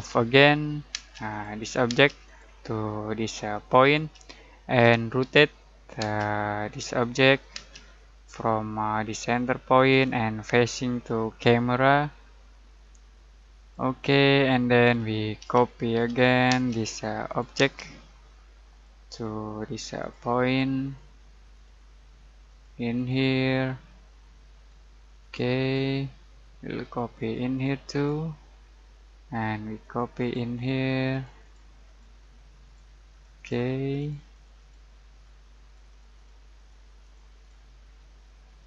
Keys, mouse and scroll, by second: 0.9 alt+space, 1.3 alt+click, 2.0 alt+space, 2.3 alt+click, 3.8 alt+click, 4.8 alt+r, 6.0 alt+space, 7.0 alt+click, 7.6 alt+space, 7.8 alt+scroll down 1, 8.5-9.1 alt+middle drag, 9.8 alt+click, 10.3-10.8 alt+scroll down 1, 11.1 alt+middle click, 13.6 alt+click, 14.1 alt+scroll up 1, 14.7-15.3 alt+middle click, 15.4 alt+c, 16.0 alt+o, 16.5 alt+space, 17.3 alt+click, 17.6 alt+space, 17.8 alt+scroll down 2, 18.1 alt+middle click, 18.8 alt+click, 28.7 alt+middle click, 29.8 alt+click.